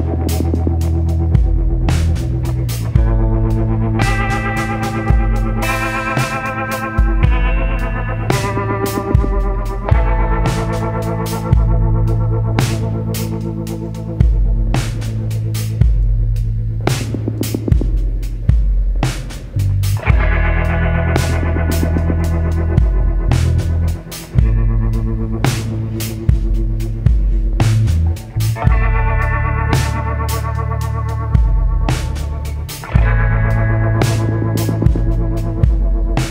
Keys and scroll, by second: 8.3 ctrl+z, 28.2 ctrl+z, 29.9 ctrl+z.